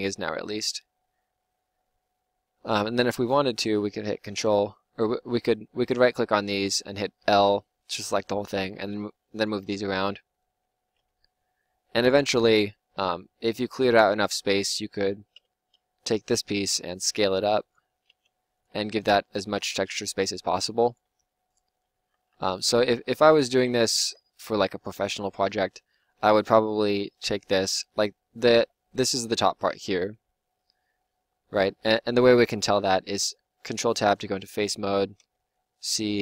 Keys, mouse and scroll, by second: 3.1-7.5 drag, 4.4 l, 7.9 g, 8.7 click, 10.6 l, 11.2 g, 14.4-16.3 drag, 15.3 l, 16.3 g, 18.1 s, 18.7 g, 20.1 s, 20.4 g, 20.9 s, 21.6-23.6 drag, 22.1 ctrl+z, 22.3 ctrl+z, 22.6 ctrl+z, 22.9 ctrl+z, 23.2 ctrl+z, 23.6 ctrl+z, 29.9 l, 33.0 ctrl+Tab, 35.1 c.